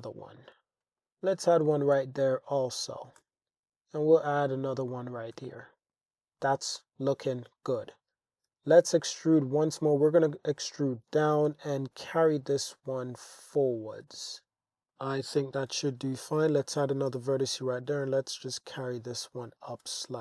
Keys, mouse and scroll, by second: 0.4 click, 0.5 Tab, 0.9 Tab, 0.9 super+r, 1.0 click, 1.7 g, 1.9 z, 3.1 click, 3.2 Tab, 3.7 Tab, 3.7 g, 3.7 z, 5.2 click, 5.4 Tab, 6.2 alt+Tab, 6.3 alt+z, 6.8 alt+z, 8.5 e, 9.1 z, 10.3 click, 11.5 g, 11.6 y, 14.9 click, 15.7 super+r, 16.1 click, 16.8 g, 17.1 z, 19.2 click.